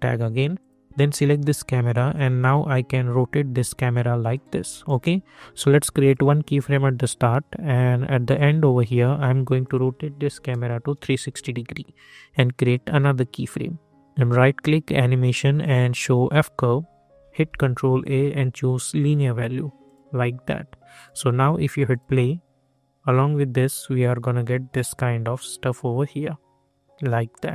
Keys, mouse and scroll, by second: 4.8 Return, 6.0 click, 8.2 click, 11.1 Return, 12.6 click, 14.1 right click, 16.2 click, 17.4 ctrl+a, 18.9 click, 27.3 click.